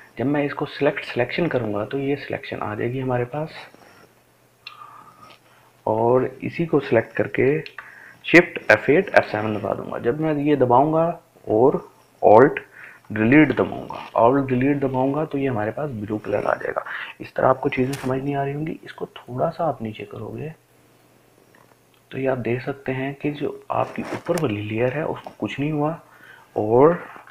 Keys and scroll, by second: 9.1 shift+F8, 9.4 shift+F7, 13.9 alt+Delete.